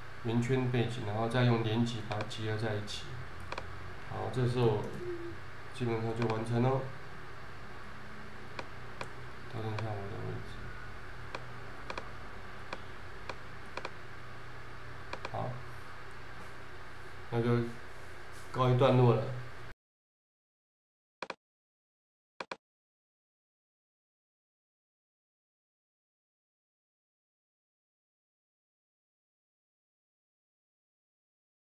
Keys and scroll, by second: 4.8 super+-.